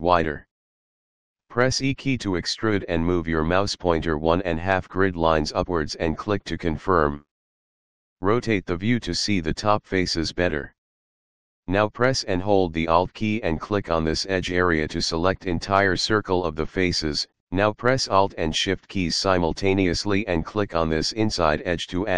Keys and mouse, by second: 1.3 e, 6.4 click, 7.5 middle click, 9.0 shift+middle click, 14.8 alt+click.